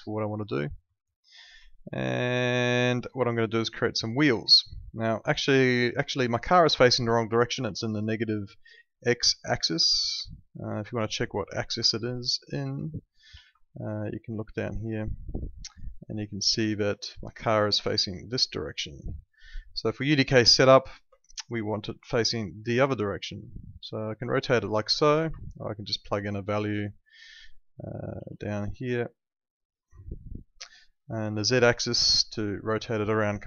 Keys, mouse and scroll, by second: 0.4 alt+middle click, 1.0 alt+middle click, 1.7 alt+middle click, 3.7 click, 4.1 alt+middle click, 5.2 alt+middle click, 6.4 middle click, 6.8 alt+middle click, 7.7 alt+middle click, 8.8 alt+middle click, 13.3 ctrl+2, 14.0 click, 17.4 click, 21.0 Escape, 21.6 alt+middle click, 21.9 e, 22.9 click, 25.9 click, 28.1 ctrl+2, 30.5 Escape, 32.0 click, 33.2-33.4 typing.